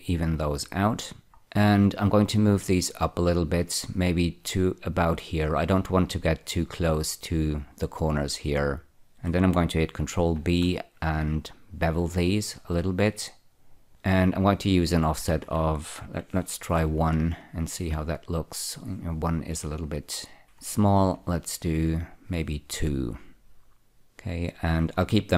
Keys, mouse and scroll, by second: 0.4 click, 1.4 scroll up 1, 2.8 click, 10.7 ctrl+b, 13.9 click, 15.3 click, 16.9 1, 18.2 Return, 20.3 click, 20.7 2, 21.3 Return, 24.1-25.3 drag.